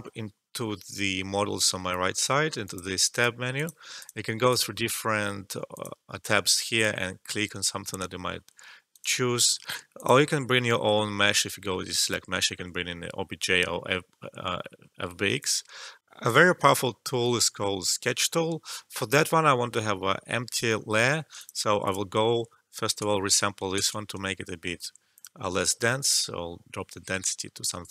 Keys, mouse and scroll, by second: 2.1 click, 8.9 click, 15.3 click, 16.0 alt+F12, 21.3 click, 22.8 space, 25.1-27.9 drag.